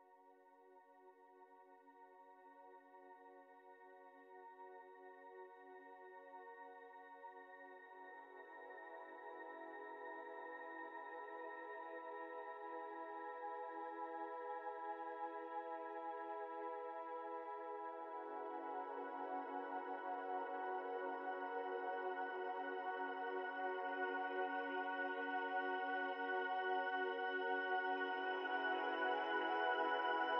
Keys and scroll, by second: 6.4 space, 6.7 ctrl+z, 10.0 space, 11.7 space, 11.9 ctrl+z, 14.4 ctrl+z, 23.8 ctrl+z.